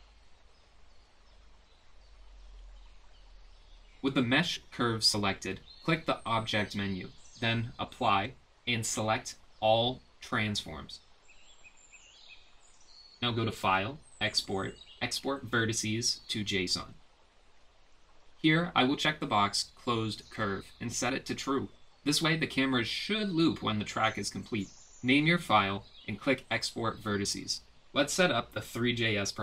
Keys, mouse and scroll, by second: 8.3-13.4 drag, 14.7-18.1 drag.